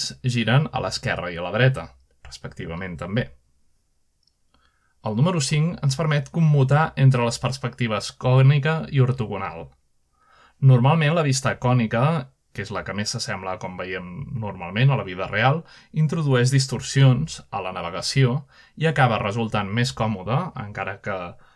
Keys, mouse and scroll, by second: 0.0-2.8 typing, 5.4 4, 6.4 5, 7.2 5, 8.1 5, 9.5 5, 10.2 5, 13.7 5, 18.2-19.2 middle drag, 18.4-19.8 scroll up 1, 19.7 middle click, 20.1-20.9 shift+middle drag, 21.2 z.